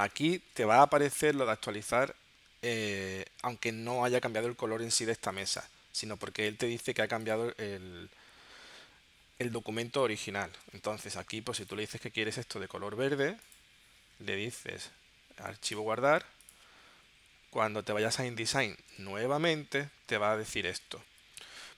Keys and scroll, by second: 9.9 super+Tab, 18.4 super+Tab, 21.1 shift+super+p.